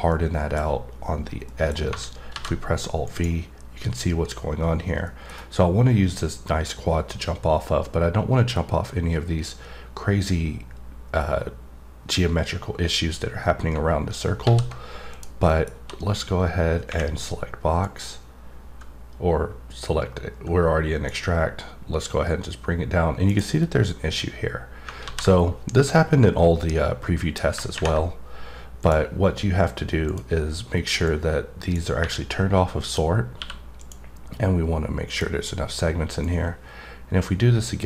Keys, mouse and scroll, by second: 0.1 middle click, 1.7 middle click, 3.0 click, 5.0 middle click, 15.1 click, 15.4 middle click, 17.8-21.2 drag, 23.2 right click, 28.8 click, 30.1 click, 31.1 click, 33.8 click, 34.2-35.1 scroll up 2, 35.1 click, 36.2 click.